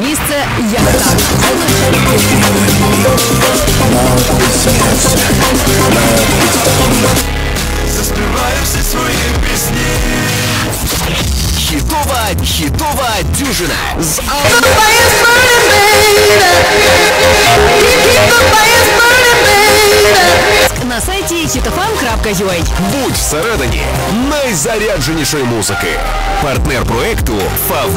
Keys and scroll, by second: 7.6 Page_Down, 20.6 Page_Down.